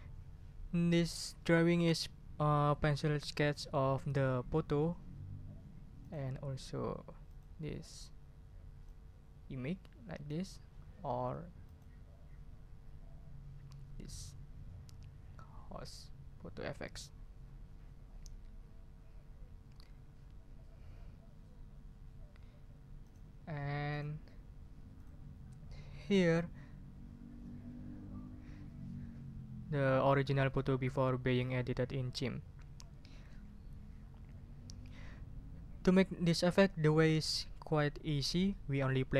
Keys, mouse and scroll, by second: 6.0 click, 7.3 click, 8.8-10.4 drag, 11.6 click, 23.0 click, 23.9 click, 25.0 click, 26.2 scroll down 1, 34.2 scroll up 1.